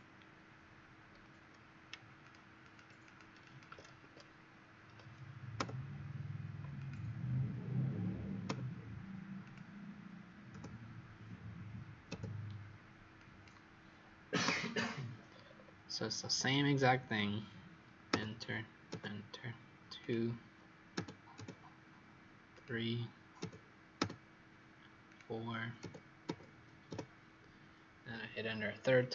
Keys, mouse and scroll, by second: 2.1 shift+click, 2.6 shift+click, 5.5 Return, 6.7 click, 8.4 Return, 9.4 click, 10.4 Return, 13.1 click, 14.4 Return, 15.2-16.1 scroll down 6, 16.1 scroll up 2, 18.0 Return, 19.9 click, 20.9 Return, 21.3 Return, 22.4 click, 23.3 Return, 23.9 Return, 25.0 click, 25.7 Return, 26.2 Return, 26.8 Return.